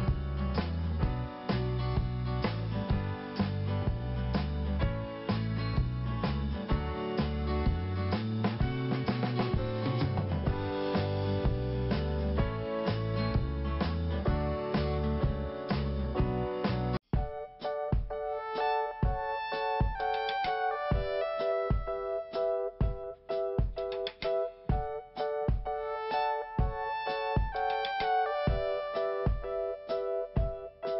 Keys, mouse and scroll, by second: 0.3 click, 2.0 click, 2.1 click, 2.7 click, 4.6 click, 4.9 click, 5.0 double click, 5.4 double click, 6.8-7.1 scroll down 1, 7.4 scroll down 1, 7.9 scroll up 1, 8.6 click, 10.2 click, 12.6 scroll down 2, 13.6 click, 13.9 click, 15.1 i, 16.2 scroll down 1, 17.5 scroll up 1, 20.1 click, 21.4 click, 21.6 click, 21.7 double click, 22.4 double click, 26.6 click, 26.8 click, 26.9 click, 27.0 double click, 27.4 double click, 27.7 double click, 27.9 double click, 28.0 double click, 29.7 click, 30.6 click.